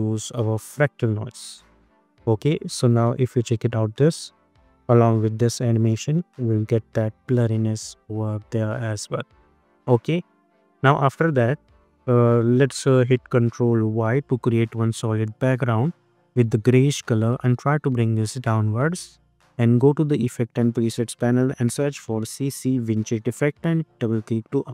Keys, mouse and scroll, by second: 2.8 space, 9.4 space, 11.7 click, 12.3 i, 14.2 ctrl+y, 15.1 Return, 17.2-19.9 drag, 20.1 ctrl+a, 21.6-23.0 typing, 24.3 click.